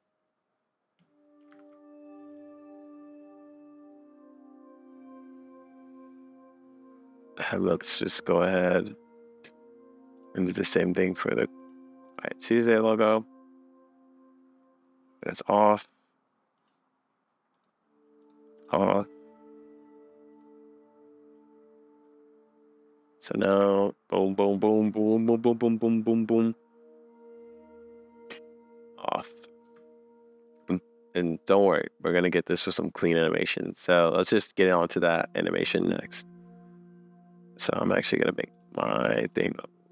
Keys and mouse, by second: 1.6 super+s, 10.2 click, 11.7 click, 13.1-15.2 drag, 18.2 click, 23.2 middle click, 23.5 space, 26.5 middle click, 26.7 middle click, 26.8 middle click, 28.4 middle click, 29.6 space, 31.8 click, 34.6 click, 35.4 middle click, 36.1 middle click, 36.7 middle click, 36.9 middle click, 37.5 click.